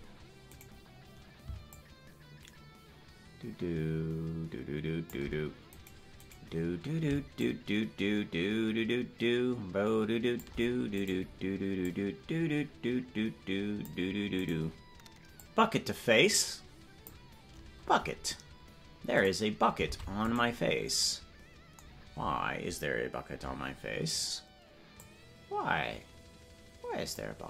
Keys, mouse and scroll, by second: 0.6 right click, 0.6-1.7 scroll up 2, 1.7-4.2 shift+drag, 5.7-7.3 right drag, 7.3-10.4 shift+drag, 11.0 right click, 11.8-14.4 drag, 14.4 right click, 15.3-17.1 drag, 19.2 right click, 19.9 ctrl+Tab, 20.3 right click, 24.9-27.2 drag.